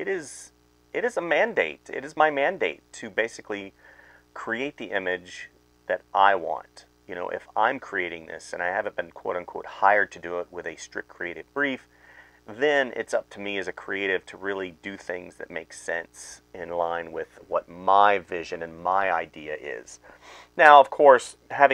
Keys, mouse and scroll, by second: 0.5-5.0 typing, 2.5 ctrl+z, 5.7 right click, 6.7 space, 8.4-13.1 typing, 14.6 space, 15.0 space, 15.3 space, 16.0 space, 17.2-21.7 typing.